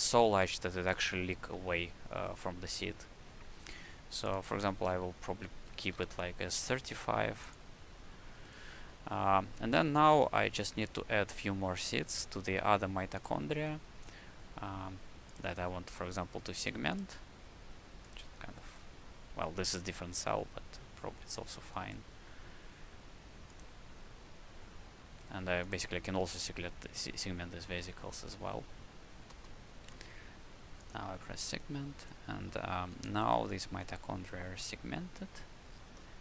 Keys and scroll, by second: 5.7 KP_5, 8.7 q, 29.2 shift+a, 32.3 alt+a.